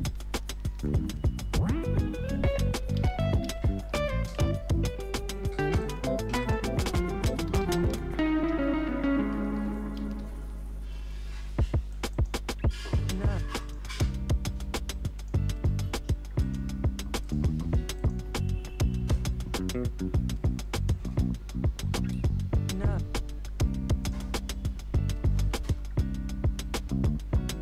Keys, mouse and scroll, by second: 0.7 ctrl+y, 2.4-4.4 typing, 6.9-10.6 typing, 8.4 ctrl+a, 11.9 click, 22.1 Return, 24.0 alt+click, 24.9-26.1 typing.